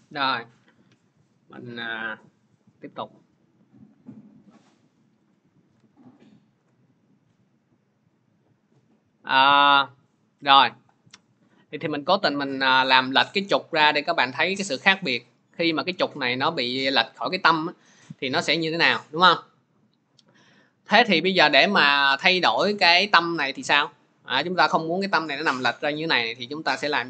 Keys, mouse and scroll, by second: 5.4 click, 5.5 alt+Tab, 6.4 alt+Tab, 9.1 click, 12.4 click, 13.0 click, 14.6 click, 19.6 click.